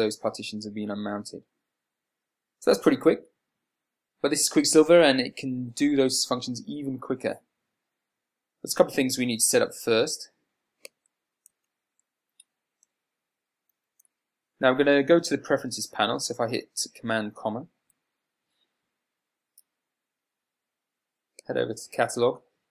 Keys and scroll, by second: 12.0 super+w, 18.2 ,.